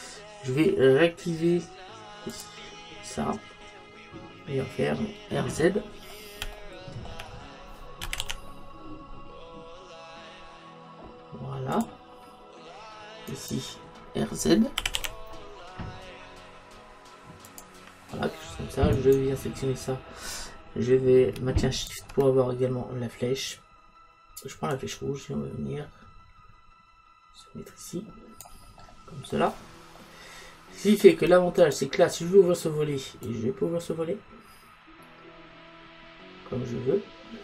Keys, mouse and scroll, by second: 2.4 click, 5.8-8.6 middle drag, 8.1 r, 11.9-13.4 drag, 13.4-14.8 right drag, 14.8 r, 17.6-19.0 drag, 19.0 right click, 19.5-21.8 middle drag, 21.8 click, 28.9-31.3 middle drag, 31.7-33.3 right drag, 33.3 click.